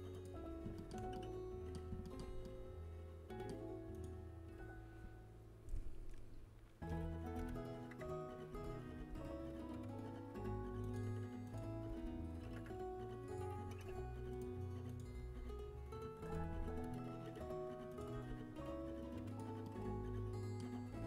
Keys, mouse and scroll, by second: 0.3-2.4 middle drag, 3.9 middle click, 4.3-6.9 right drag, 6.9 KP_1, 8.2 KP_3, 8.5 z, 8.9 g, 11.4-13.1 right drag, 11.8 g, 14.8-17.0 right drag, 16.3 g, 17.0 z, 18.7 right click, 18.7 g.